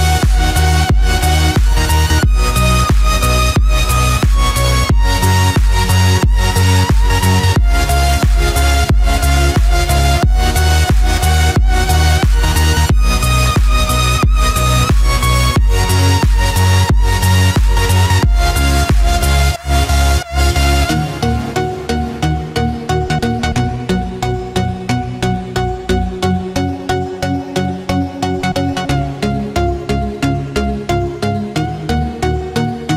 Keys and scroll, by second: 3.9 ctrl+=, 12.0 ctrl+-, 14.0 ctrl+=, 14.9 ctrl+z, 16.5 ctrl+=, 30.7 ctrl+-.